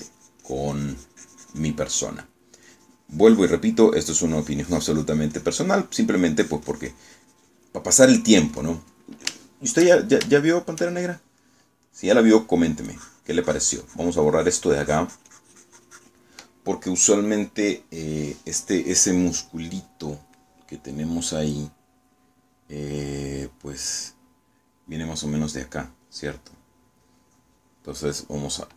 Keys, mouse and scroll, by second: 3.8-6.9 drag, 6.9 middle click, 7.5-10.0 drag, 10.4-12.0 shift+middle drag, 12.2 shift+middle click, 13.2 middle click, 14.0-17.4 drag, 19.9 scroll down 1, 20.2 scroll up 1, 20.3 scroll down 1, 20.4 scroll up 1.